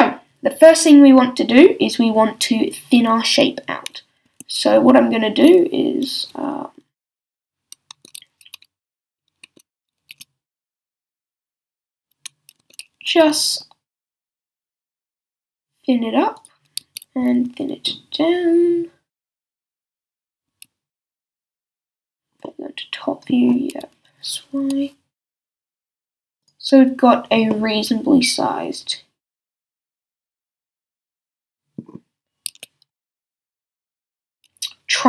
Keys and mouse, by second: 4.3 a, 7.9 Tab, 9.0 Tab, 9.4 Tab, 10.1 s, 11.5-12.6 drag, 12.6 Tab, 13.0 s, 16.5-18.1 drag, 16.8 s, 20.2 s, 23.8 s, 25.9 middle click, 26.5-29.1 drag, 31.2-32.5 middle drag, 32.5 s, 34.2-35.0 drag.